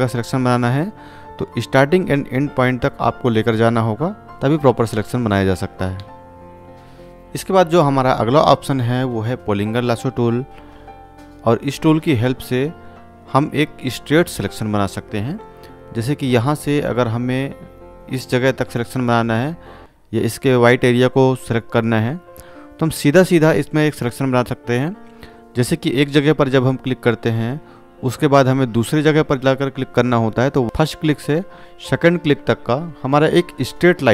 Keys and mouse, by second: 2.8-5.7 drag, 6.2 v, 9.4 v, 9.4 right click, 19.9 click, 23.4 click, 27.7-28.5 drag.